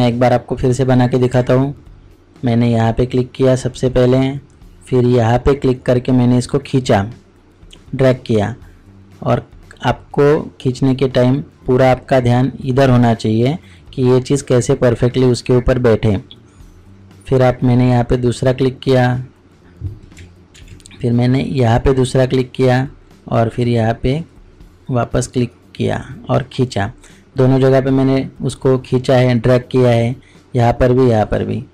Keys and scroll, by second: 20.6 ctrl+z.